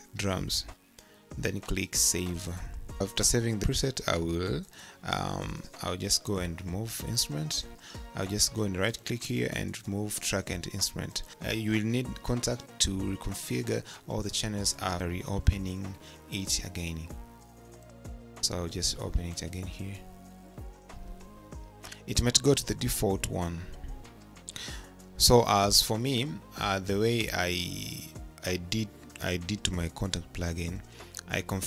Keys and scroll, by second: 0.1 d, 0.3 Caps_Lock, 0.7 space, 0.7 1.